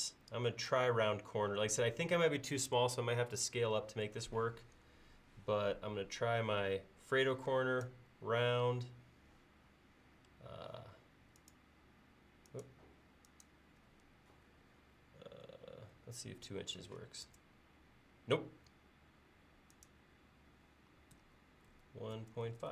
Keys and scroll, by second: 16.3 typing, 21.5-22.7 typing.